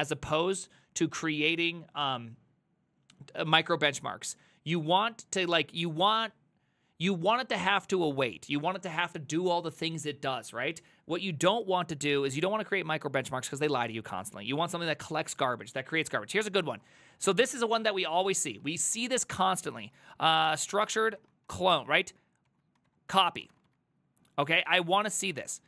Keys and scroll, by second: 16.9 alt+{, 18.2-25.6 typing.